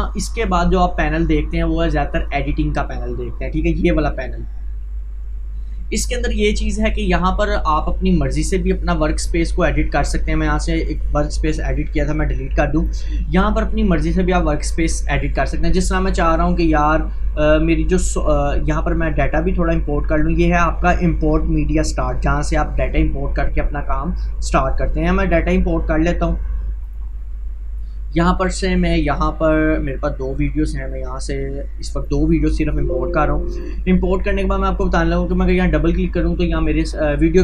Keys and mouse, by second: 2.1 click, 7.6 click, 25.2 click, 25.3-30.0 drag, 30.3-37.4 ctrl+drag.